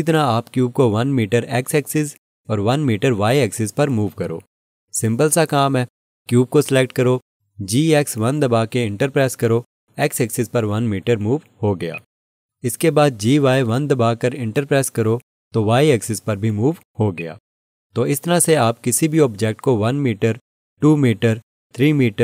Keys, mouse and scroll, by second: 8.0 g, 8.7 x, 9.5 1, 10.5 Return, 11.9 alt+click, 14.4 y, 15.0 1, 16.1 Return, 17.1 click, 20.4 ctrl+z.